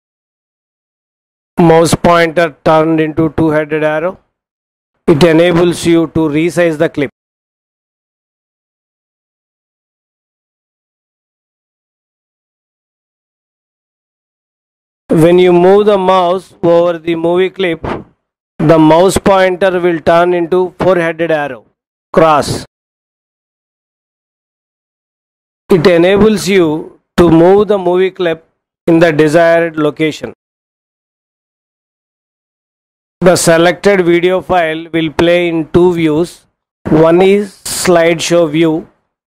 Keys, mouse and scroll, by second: 9.5-13.6 drag, 30.5-32.0 drag.